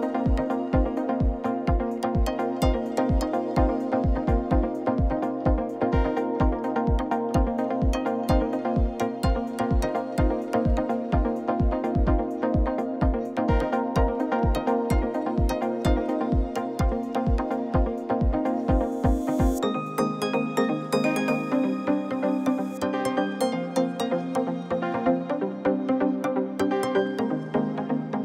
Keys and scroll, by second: 0.6-5.0 typing, 1.8 Tab, 6.8 3, 8.6 r, 8.7 d, 9.1 Return, 12.0 w, 12.0 h, 12.1 i, 12.2 t, 12.4 Return, 13.9 3, 17.3 Tab, 17.6 g, 17.8 z, 19.3 Tab, 19.6 3, 19.9 shift+z, 21.1 i, 22.6 e, 23.6 shift+z, 25.3 ctrl++, 26.8 Tab.